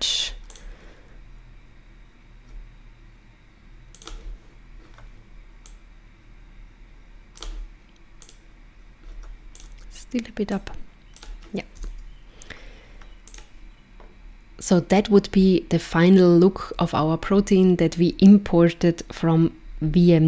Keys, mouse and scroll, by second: 0.1 click, 0.5 click, 3.9 click, 5.7 click, 8.2 click, 9.5 click, 10.5 click, 11.8 KP_0, 13.2 click.